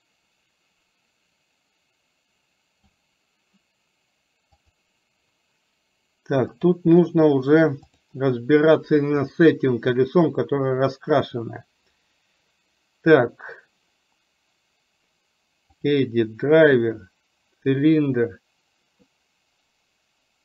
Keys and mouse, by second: 7.9 click.